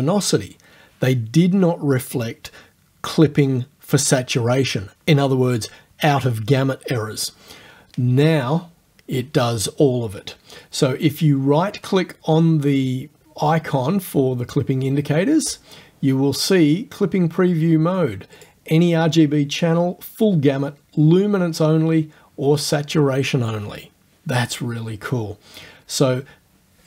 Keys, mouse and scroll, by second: 15.5 click, 15.6 right click, 18.4 click.